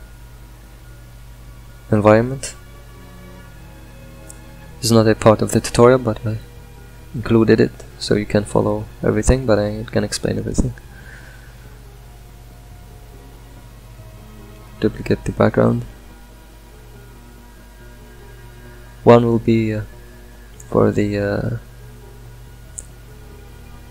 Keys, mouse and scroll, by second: 10.6 click, 11.6 shift+d, 15.2 click.